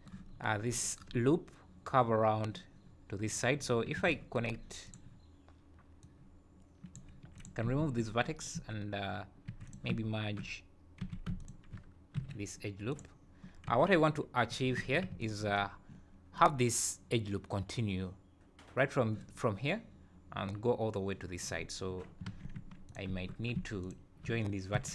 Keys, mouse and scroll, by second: 0.3 scroll up 2, 3.6 scroll up 3, 4.0 alt+a, 4.9 click, 6.0 click, 7.3 2, 7.4 click, 7.8 ctrl+x, 9.5 1, 9.7 click, 11.0 w, 11.4 shift+click, 12.2 alt+m, 13.7 2, 14.5 2, 14.8 3, 15.2 alt+click, 15.6 scroll down 5, 21.6 scroll up 3, 22.3 alt+a, 22.6 1, 22.9 click, 23.8 shift+click, 24.8 j.